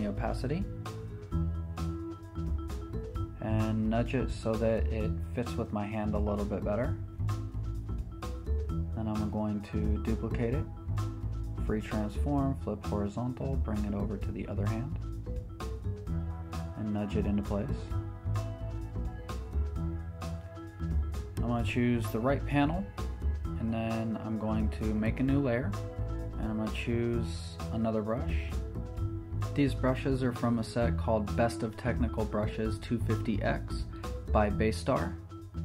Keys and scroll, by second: 0.5 Left, 1.4 Up, 1.5 Right, 1.8 Down, 2.8 Right, 3.0 Up, 4.8 super+t, 6.1 v, 7.2 Return, 7.7 Left, 8.4 Down, 9.3 Right, 9.9 Down, 11.2 Left, 11.6 Down, 11.8 Right, 14.6 shift+super+n, 14.7 Return, 26.4 ], 26.6 [, 26.8 [, 30.9 ].